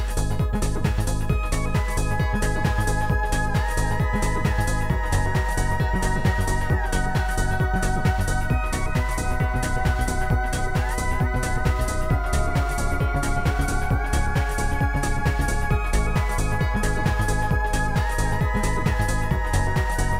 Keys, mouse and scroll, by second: 2.6 click, 3.8 click, 3.9 click, 5.0 click, 5.4 click, 6.0 click, 6.7 click, 7.3 click, 7.6 click, 8.0 shift+click, 8.7 shift+click, 9.3 shift+click, 9.9 Delete, 9.9 shift+click, 11.1 Delete, 11.6 shift+click, 12.6 shift+click, 14.2 shift+click, 15.2 shift+click, 17.7 click, 18.7 Return, 19.8 click.